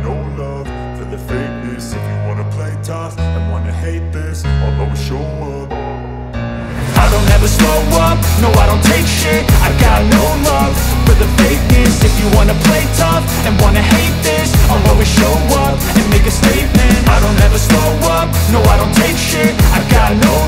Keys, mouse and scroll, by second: 0.2 ctrl+z, 0.7-2.7 drag, 3.2-3.9 alt+click, 4.1 alt+click, 4.4-5.3 drag, 6.7-7.6 drag, 8.6 ctrl+z, 9.2 alt+click, 9.5-10.5 drag, 11.5-13.1 drag, 13.2 scroll up 1, 13.7 right click, 14.5 click, 15.7 click, 18.1 click, 19.3 ctrl+j, 19.9 click.